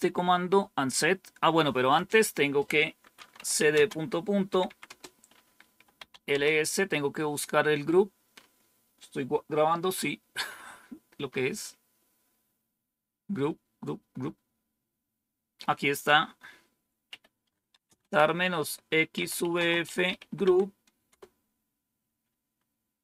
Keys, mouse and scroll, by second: 1.8 click, 3.0-6.4 typing, 11.2 scroll up 1, 14.5-15.2 scroll down 1, 15.8 click, 16.7-21.0 typing.